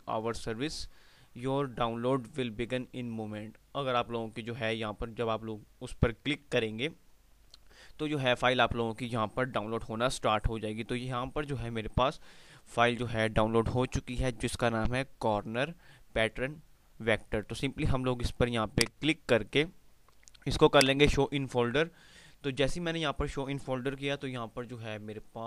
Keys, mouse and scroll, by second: 8.4 click, 9.8 F5, 10.6 typing, 18.9 click, 19.9 typing.